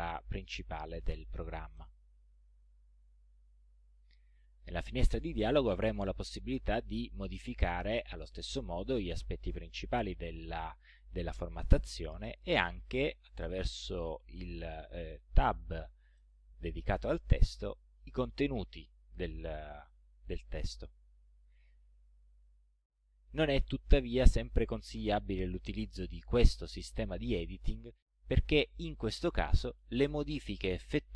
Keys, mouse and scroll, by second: 1.8 click, 3.5-4.6 drag, 16.2 click, 26.3-27.8 drag.